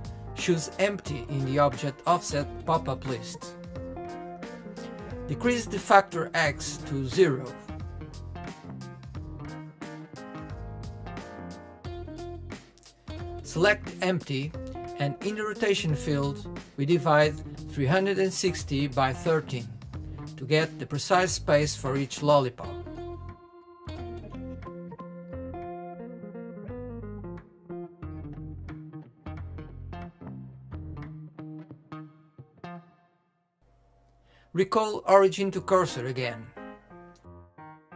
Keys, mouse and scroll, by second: 2.7 click, 5.6-8.6 drag, 10.1 click, 20.6 click, 28.9-30.2 drag, 33.8 ctrl+z, 34.4 click, 35.2 click, 37.1 space.